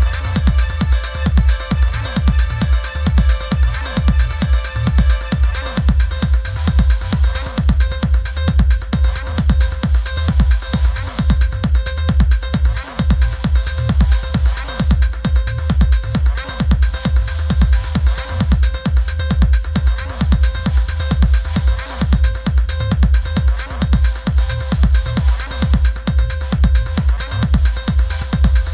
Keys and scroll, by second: 0.2 super+=, 12.9 i.